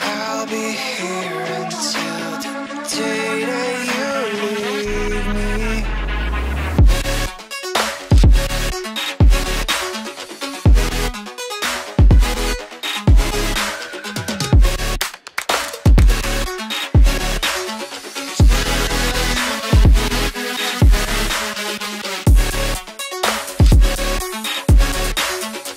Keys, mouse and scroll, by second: 0.7 F2, 1.6 typing, 4.6 shift+right click, 7.2 double click, 7.8 ctrl+z, 10.8 double click, 11.2-11.7 scroll down 1, 11.9 right click, 16.5 F2, 18.5-18.9 scroll down 1, 19.9 ctrl+click, 20.6 scroll down 1, 23.1 right click, 24.7 ctrl+click, 25.6 double click.